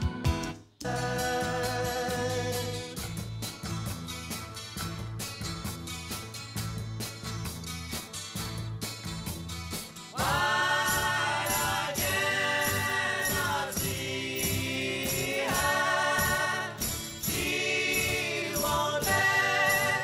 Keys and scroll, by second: 0.4 space.